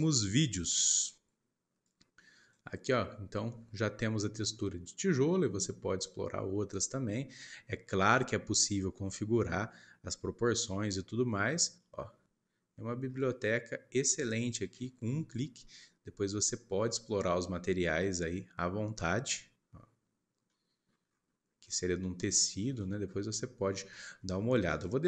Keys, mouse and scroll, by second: 1.7-3.0 drag, 3.0-3.6 scroll up 5, 3.8 scroll down 1, 4.0 middle click, 4.5 scroll up 2, 11.5 scroll down 1, 11.8-14.8 middle drag, 20.3 scroll down 1, 20.4 middle click, 21.0-22.2 scroll up 9, 22.2-22.8 scroll down 6, 22.8 middle click, 23.0-23.9 scroll up 1, 23.9 shift+middle click, 24.6-25.0 drag.